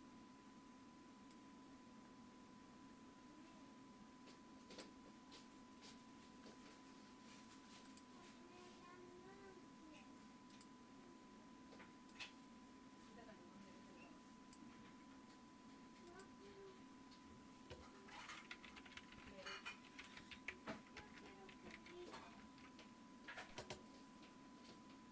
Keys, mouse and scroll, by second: 5.1 click, 5.4-7.6 drag, 8.0-9.1 drag, 10.6-18.8 drag, 18.5-22.5 typing.